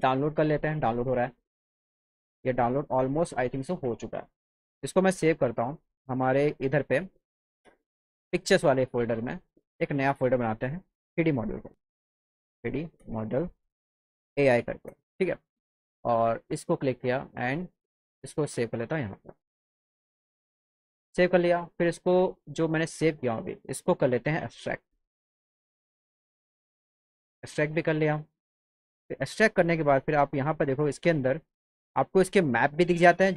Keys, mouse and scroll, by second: 3.8 click, 8.0 click, 8.4 click, 9.3 click, 10.1 click, 12.3-14.6 typing, 16.2 click, 16.3 click, 17.4 click, 18.5 click, 21.6 click, 23.6 click, 24.9 click, 26.4 click, 29.2 click, 30.0 click, 30.8 click, 31.0 click, 31.8 click, 31.9 click.